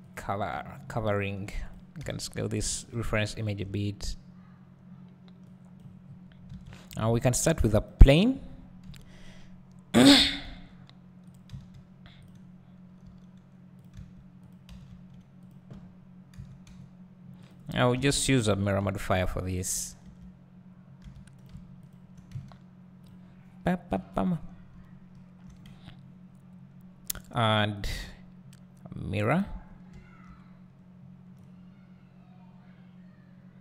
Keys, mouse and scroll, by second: 0.1 click, 0.6 g, 1.7 click, 2.0 s, 2.8 click, 2.9 g, 3.4 click, 3.6 `, 5.4-11.3 drag, 6.0-6.5 scroll up 2, 6.5 alt+a, 8.8 KP_7, 9.9-10.4 scroll down 2, 10.4 g, 13.0 g, 13.8 click, 14.0 s, 14.5 click, 14.7 s, 15.5 click, 16.4 s, 17.5 click, 17.9 Tab, 18.8 ctrl+r, 19.6 right click, 20.0 `, 21.0 1, 21.4 click, 21.9 shift+click, 23.0 x, 23.9 Tab, 24.8 `, 26.6-29.3 scroll up 1, 29.4-33.6 drag.